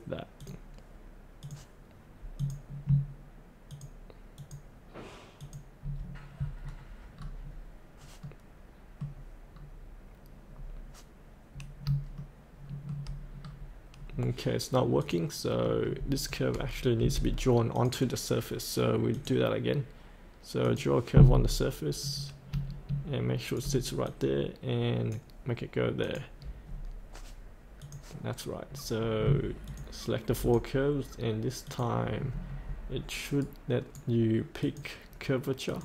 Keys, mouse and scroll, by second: 3.7 ctrl+click, 4.3 ctrl+click, 5.4 ctrl+click, 6.5 scroll up 1, 7.1-8.2 scroll down 1, 8.2 middle click, 9.5-10.5 scroll down 1, 10.5-11.8 scroll up 2, 12.1 shift+middle click, 13.4 scroll down 1, 13.9-15.0 scroll up 1, 15.0 click, 17.0 Delete, 17.7-23.5 drag, 24.0-25.3 drag, 29.6 ctrl+click, 30.4 ctrl+click, 31.6 ctrl+click, 33.4 right click, 34.6 click.